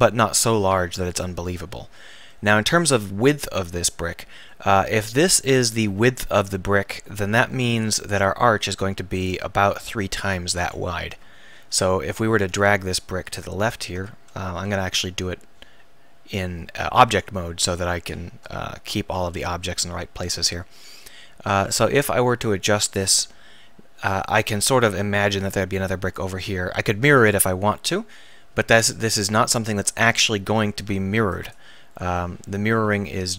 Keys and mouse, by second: 1.0 KP_1, 11.6 KP_1, 12.6 a, 14.3 Tab, 24.7 KP_1, 29.1-31.5 drag.